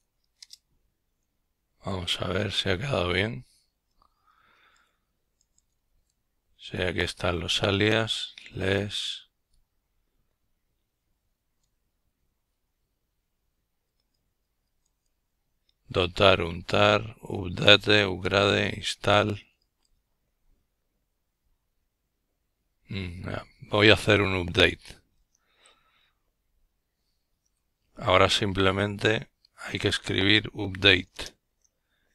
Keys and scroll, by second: 17.0 Escape, 19.1 typing, 20.3 typing, 20.7 Return, 23.6 ctrl+l, 24.6-27.0 typing, 27.9 Return.